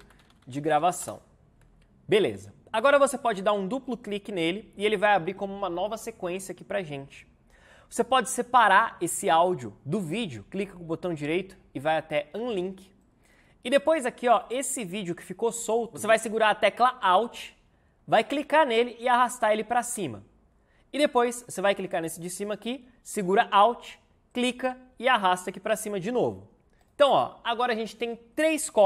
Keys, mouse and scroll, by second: 0.0-1.1 typing.